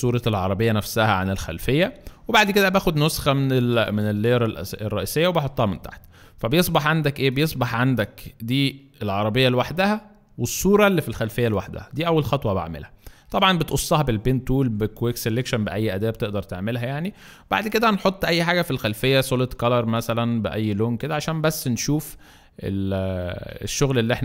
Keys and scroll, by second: 0.2 shift+space, 1.1 alt+shift+space, 1.9 alt+shift+space, 3.8 alt+shift+space, 4.6 alt+shift+space, 11.9 ctrl+z, 13.3 space.